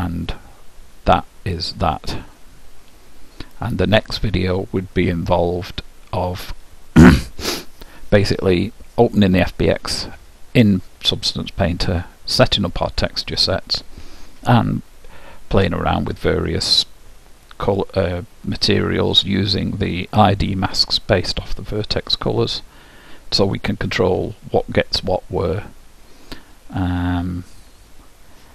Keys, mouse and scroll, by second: 0.0-1.6 drag, 26.6-28.4 middle drag.